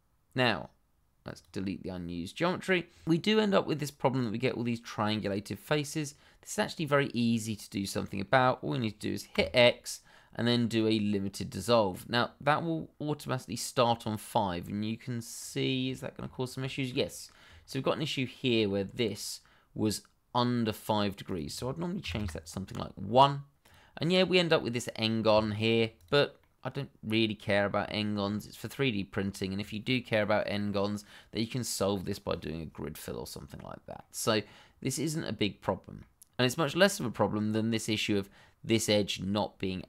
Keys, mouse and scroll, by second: 1.2 click, 1.9 middle click, 6.5 scroll down 1, 6.9 middle click, 8.2 shift+middle click, 8.6 middle click, 9.3 x, 11.5 click, 13.8 scroll up 1, 14.6 middle click, 15.6-15.9 scroll down 1, 15.9 shift+middle click, 16.3-16.6 shift+scroll up 1, 16.6 shift+middle click, 17.0 middle click, 17.6 shift+middle click, 17.7 middle click, 17.8 shift+middle click, 18.1 scroll down 1, 18.4 middle click, 18.8-20.0 scroll up 1, 21.2 click, 22.0 1, 22.1 Return, 23.0-23.6 scroll down 1, 23.6 click, 23.9 scroll down 1, 24.5 scroll down 1, 24.6 shift+middle click, 25.3 middle click, 25.9 click, 26.4 middle click, 27.4 scroll up 1, 28.0 shift+middle click, 33.4-33.9 scroll down 1, 33.9 middle click, 36.9 middle click, 37.7 click, 39.7 middle click.